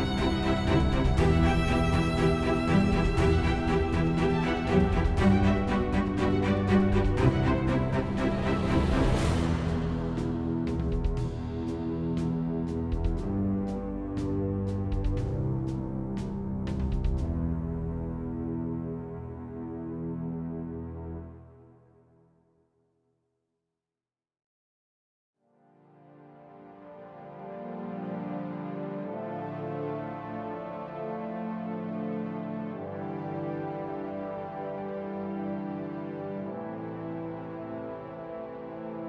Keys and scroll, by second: 0.0 Return, 15.3-16.2 typing, 19.7-21.0 typing, 37.7-38.8 typing.